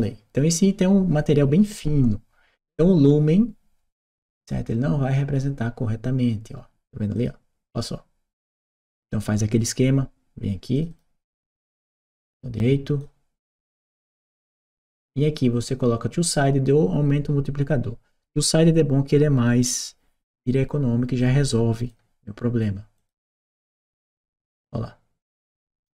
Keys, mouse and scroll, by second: 3.9 click, 6.9 click, 10.6 click, 12.1 click, 13.2-14.8 scroll down 1, 21.0 click, 22.8 click, 23.7 click.